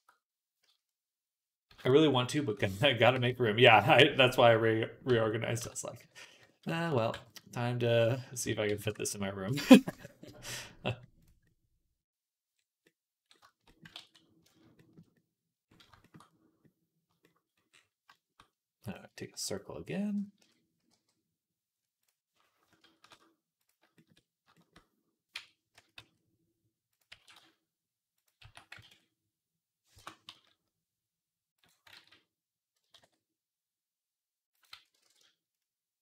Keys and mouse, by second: 0.5 z, 1.5 z, 2.2 g, 3.0 g, 4.9 Tab, 5.5 Tab, 5.9 z, 6.5 z, 6.9 b, 8.3 s, 9.3 z, 9.8 Tab, 13.8 ctrl+s, 19.1 shift+d, 20.2 KP_3, 20.7 g, 22.8 shift+s, 25.2 Tab, 25.6 a, 25.8 middle click, 25.8 s, 26.7-28.3 drag, 27.0 e, 28.3-31.4 alt+middle drag, 28.3 a, 28.7 alt+s, 30.2 s, 31.4 click, 31.8 ctrl+z, 32.8 alt+s, 34.6 ctrl+z, 34.9 alt+s.